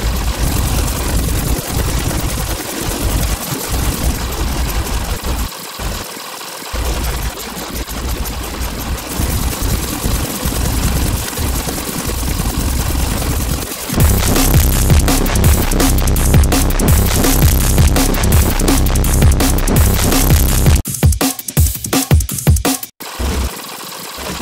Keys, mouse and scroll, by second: 0.0 scroll down 2, 0.2 alt+click, 0.7 scroll up 2, 0.8 click, 1.2 alt+click, 1.3 click, 1.7 alt+click, 1.9 alt+click, 2.3 click, 2.7 alt+click, 3.1 scroll down 2, 3.3 click, 3.9 scroll up 2, 4.1 click, 4.9 click, 5.1 space, 5.4 space, 5.7 scroll down 2, 6.0 space, 6.1 click, 6.4 click, 7.6 click, 7.8 click, 8.4-8.8 scroll down 2, 8.9 click, 9.0 click, 9.2 ctrl+click, 9.7 alt+click, 9.9 click, 10.4 scroll up 2, 10.5 alt+click, 10.9 click, 11.1 scroll down 2, 11.2 scroll up 2, 11.7 m, 12.0 click, 13.4 click, 13.4 scroll down 2, 13.6 right click, 13.7 ctrl+click, 13.9 scroll down 2, 14.4-14.8 scroll up 2, 15.8 right click, 20.7 click, 21.8-24.4 typing, 22.4 scroll down 2, 23.0 click, 23.1 scroll down 2, 23.4 scroll up 2, 23.5 click, 23.6 click, 23.9 click.